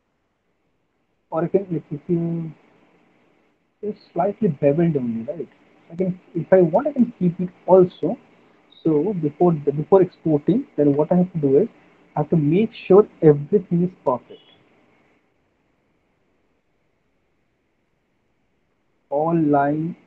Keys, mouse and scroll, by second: 1.7 ctrl+z, 2.2 ctrl+z, 3.2 ctrl+z, 3.4 ctrl+z, 6.4 alt+middle click, 6.8 middle click, 7.9 alt+middle click, 9.0 alt+w, 10.9 alt+w, 11.6 middle click, 12.6 middle click, 13.0 alt+middle click, 15.6 click, 15.6 r, 17.1 click, 17.4 click, 19.1 click.